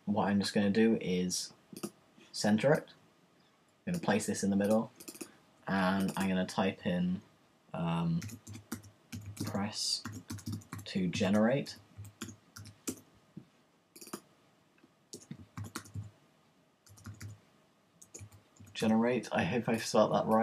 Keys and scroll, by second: 8.0-8.9 typing, 10.0-13.0 typing, 15.2 Return, 15.3-19.4 typing.